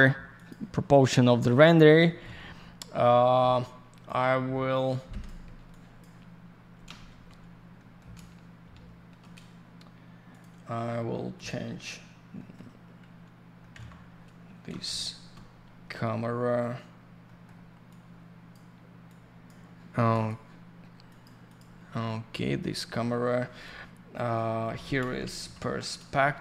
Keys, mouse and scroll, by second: 0.3 click, 1.4 click, 2.0 middle click, 4.0 click, 5.0 Escape, 5.6 click, 6.9 shift+a, 7.7 middle click, 8.6 shift+a, 10.2 click, 10.3 click, 11.3 click, 11.4 click, 12.3 middle click, 12.5 middle click, 13.6 middle click, 13.7 middle click, 14.8 shift+a, 17.2 middle click, 17.8 click, 19.0 click, 20.1 right click, 20.2 right click, 21.0 click, 21.2 click, 21.4 click, 21.5 click, 22.8 middle click, 22.9 middle click, 25.1 middle click, 25.3 middle click, 25.4 F3.